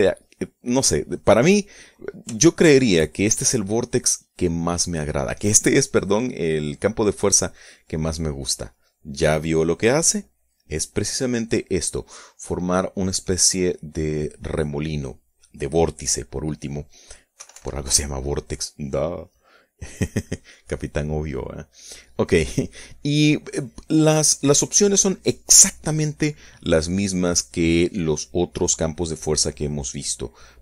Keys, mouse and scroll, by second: 0.9 middle click, 1.8 scroll up 1, 1.9 middle click, 2.5-3.0 scroll up 1, 3.0 shift+click, 3.6 shift+middle click, 3.9-5.0 shift+drag, 7.1-8.2 drag, 11.6 click, 17.9 Escape, 19.4 right click, 22.3 click.